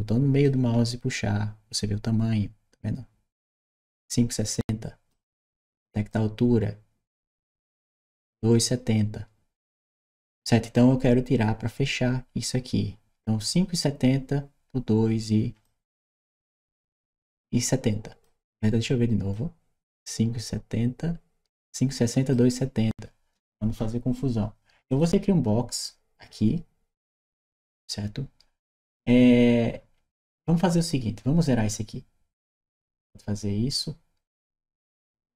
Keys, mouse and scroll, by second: 0.3-4.9 middle drag, 5.9-10.6 middle drag, 15.5-18.0 middle drag, 19.1-22.1 middle drag, 24.7 click, 32.4 click, 34.3 click, 34.9 click.